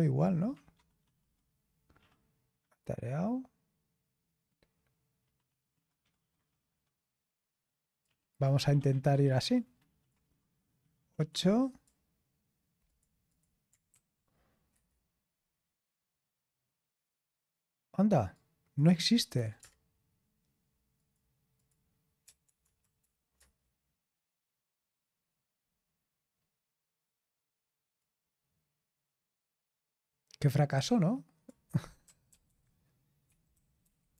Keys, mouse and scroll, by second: 8.0-10.1 drag, 11.1 click, 11.6 click, 12.8 click, 13.2 click, 13.9 ctrl+v, 14.7 Return, 18.3 click, 19.5 Return, 20.9 click, 21.5 click, 22.2-23.0 typing, 23.3 Return, 27.9-32.0 drag, 31.8-34.1 typing.